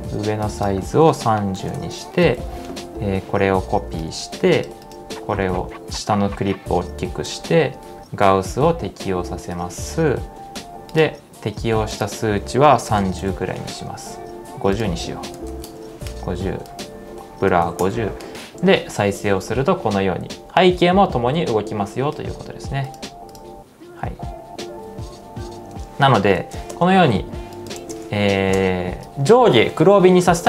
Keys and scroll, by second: 1.0-2.3 typing, 3.9-4.7 typing, 9.3-10.1 typing, 12.2-13.0 typing, 15.1-15.9 typing, 17.5 typing, 19.0 space, 21.9 space, 23.8 space, 25.8 space, 26.4 shift+z, 26.7 space, 27.8 shift+z, 28.2 space, 28.6 space.